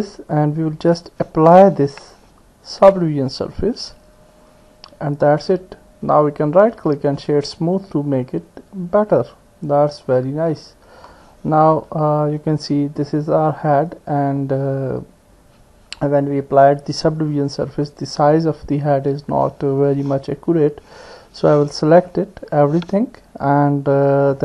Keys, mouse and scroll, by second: 2.1 Tab, 3.6 click, 6.3-7.3 right drag, 7.9-10.6 middle drag, 11.7 KP_1, 20.5 Tab, 22.6 a.